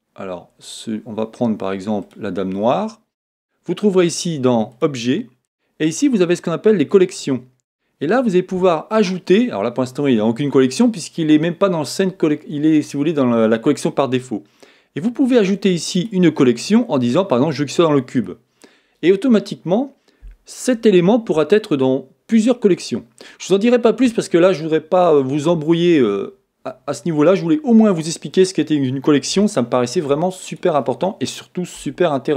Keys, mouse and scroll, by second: 27.6 scroll down 1, 28.4 middle click, 30.7 click, 31.8 Tab.